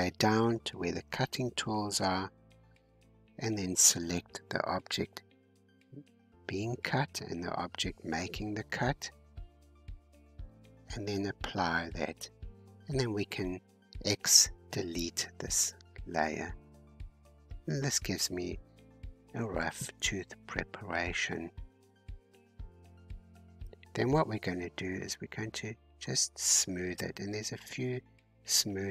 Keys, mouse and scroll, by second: 3.6-16.1 drag, 16.1 x, 17.4-17.7 scroll down 2, 17.7-20.4 middle drag, 20.4-20.7 scroll up 4, 21.4-22.5 scroll down 2, 26.3-27.4 drag, 27.4-28.0 scroll up 2, 28.0-28.9 drag.